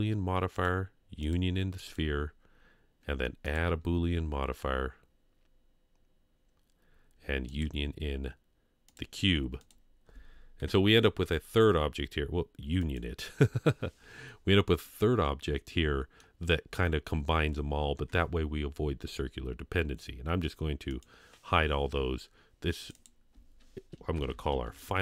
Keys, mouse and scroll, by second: 0.5 click, 1.2 click, 3.4-7.6 drag, 8.9 click, 12.8 click, 14.8-16.2 middle drag, 20.9-21.2 drag, 22.8 click, 22.9-25.0 drag.